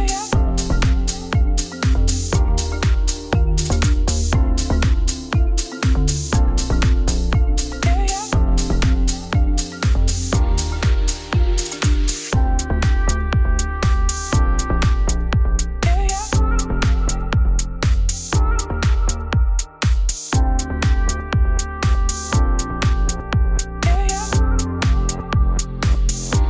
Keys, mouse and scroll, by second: 0.0 click, 0.3 click, 0.6 KP_1, 1.3 shift+d, 2.6 Tab, 2.7 s, 5.2 Tab, 5.3 g, 6.6 Tab, 6.8 1, 7.0 click, 7.2 z, 7.5 click, 8.5 g, 11.8 middle click, 12.3 Tab, 12.4 z, 12.6 shift+click, 12.9 ctrl+KP_Subtract, 13.3 ctrl+z, 15.2-17.0 middle drag, 17.3 ctrl+KP_Subtract, 18.0 click, 18.4 shift+s, 18.7 shift+a, 19.3 Tab, 19.4 r, 20.1 Tab, 20.3 KP_1, 21.3-21.6 scroll up 1, 21.6 click, 22.1 Tab, 22.2 1, 22.4 click, 22.9 g, 23.8 click, 24.2 g, 24.8 g, 25.4 click, 25.6 g, 26.4 click.